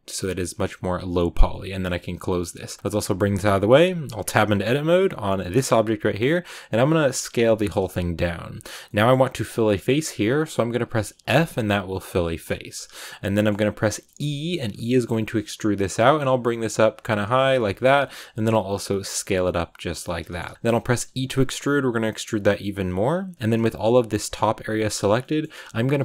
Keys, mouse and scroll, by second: 2.7 right click, 2.8 scroll down 2, 2.9 g, 3.9 right click, 4.2 Tab, 4.7 Tab, 4.9 right click, 5.2 Tab, 5.4-7.0 scroll up 2, 7.0 s, 8.8 middle click, 9.3 scroll up 1, 9.5-11.2 middle drag, 11.2 f, 13.0 scroll down 1, 13.2 middle click, 13.7-14.1 scroll down 1, 14.1 e, 17.5 shift+middle click, 17.7 scroll down 1, 17.9 middle click, 18.1 s, 20.2 shift+middle click, 20.4 s, 20.5-21.0 scroll up 1, 21.0 e, 23.3 middle click, 23.3-23.9 scroll up 2, 25.2 middle click, 25.4-26.0 scroll down 1.